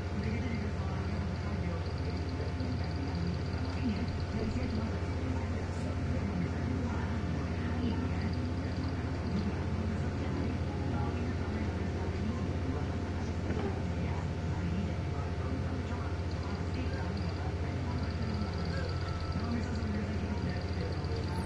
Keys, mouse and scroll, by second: 0.8 click, 1.2 right click, 2.3 click, 8.5 click.